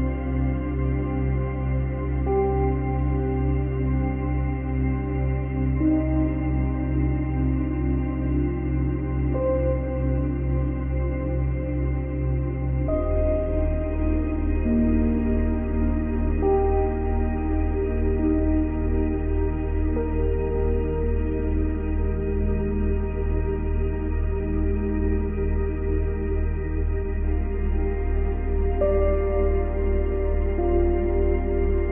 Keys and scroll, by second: 0.7 space, 7.1 space, 11.7 space, 18.4 ctrl+z, 19.5 ctrl+z, 21.7 ctrl+z.